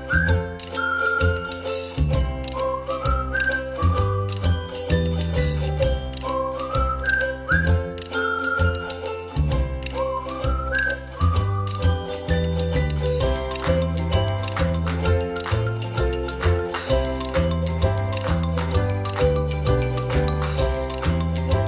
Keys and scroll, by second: 0.5 space, 0.9 ctrl+-, 1.1 ctrl+-, 1.3 ctrl+-, 1.5 ctrl+=, 14.8 ctrl+z, 17.9 ctrl+z.